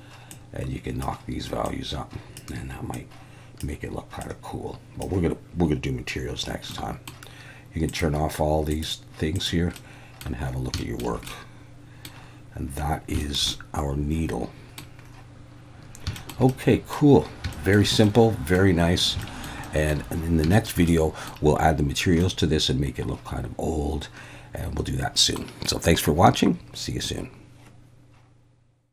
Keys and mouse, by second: 6.7-7.1 middle drag, 7.9 click, 8.7 click, 9.3 click, 9.8-10.2 middle drag, 10.8 shift+middle drag, 11.3-12.1 middle drag, 13.2 shift+middle click, 13.5-14.8 middle drag, 16.2 shift+middle click, 16.5-16.9 middle drag, 17.5 shift+middle drag, 18.0-18.6 middle drag, 19.2 shift+middle drag, 19.6 shift+middle click, 20.5 shift+middle click, 21.0 middle click, 22.2-25.4 middle drag.